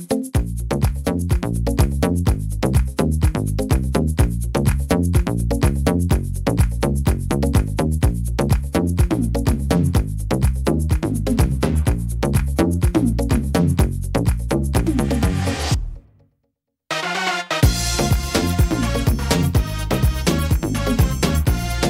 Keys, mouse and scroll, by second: 0.0 right click, 0.6 shift+right click, 1.1 shift+right click, 1.7 scroll up 1, 1.9 click, 3.1 right click, 3.4 right click, 4.0 right click, 4.8 click, 6.4 shift+middle click, 7.0-7.8 scroll up 1, 7.8 scroll up 1, 8.2 shift+middle click, 8.9-9.2 scroll down 3, 9.4 shift+middle click, 9.7 scroll up 2, 10.5 right click, 11.4 click, 12.9 right click, 13.5 right click, 13.8 right click, 15.1 right click, 16.0 click, 17.8 middle click, 18.7 middle click, 19.2 shift+middle click, 19.3 shift+middle click, 20.0 right click, 20.3 shift+right click, 21.0 click.